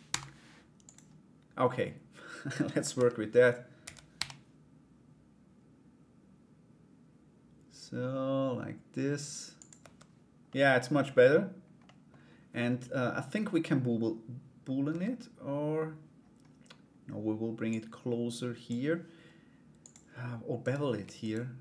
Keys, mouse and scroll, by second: 3.4 a, 3.7 g, 9.4 Tab, 10.1 middle click, 11.4 middle click, 14.5 Tab, 17.3 click, 19.4 click, 20.2 right click, 20.8 shift+right click, 21.5 alt+right click.